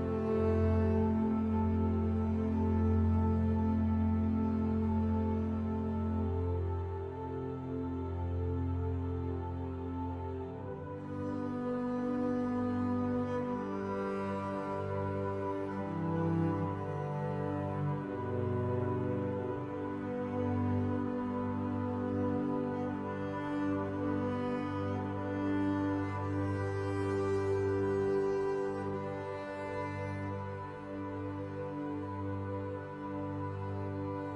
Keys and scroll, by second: 11.8 ctrl+z.